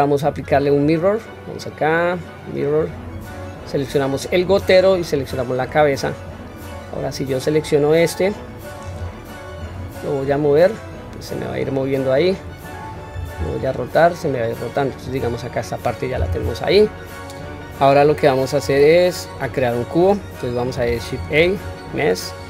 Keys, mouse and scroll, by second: 0.3-2.9 drag, 4.4 click, 6.6 click, 9.5 click, 10.5-12.4 drag, 13.3 r, 18.7 click, 21.2 shift+a.